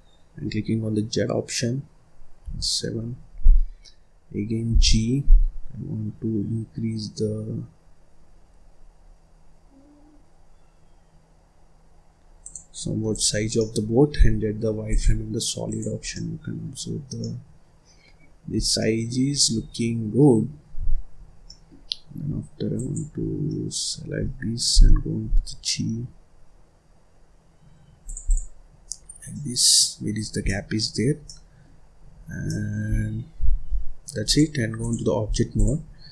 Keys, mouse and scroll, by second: 2.3 KP_7, 3.0-3.4 scroll up 1, 3.4-4.6 scroll down 1, 4.6 g, 13.0 click, 13.4 middle click, 14.0 z, 15.5 click, 15.9 scroll down 1, 16.0 middle click, 16.7 scroll up 3, 17.0 scroll down 1, 17.1-18.4 middle drag, 18.4 scroll down 4, 18.7 middle click, 19.2-19.5 scroll up 1, 19.5 scroll down 1, 19.7 middle click, 20.3-20.8 scroll down 3, 20.8-21.3 scroll up 5, 21.3 scroll down 1, 21.4 middle click, 21.7-22.2 scroll up 1, 22.2-22.6 scroll up 4, 22.6 click, 23.1 scroll down 1, 23.4 middle click, 23.8-24.6 scroll up 1, 24.6 g, 28.2 click, 28.4-28.9 scroll down 2, 28.9-29.2 scroll up 1, 29.2 middle click, 30.1-30.4 scroll down 4, 30.4 middle click, 30.8-31.2 scroll up 1, 31.2 middle click, 31.6 scroll up 1, 31.7-32.1 scroll down 1, 32.1-32.4 scroll up 1, 32.4 middle click, 32.8-33.2 scroll down 1, 33.2-34.2 scroll up 3, 34.2-35.2 drag, 35.2-35.5 scroll down 1, 35.5 click, 35.8 scroll up 1, 36.0-36.1 middle drag.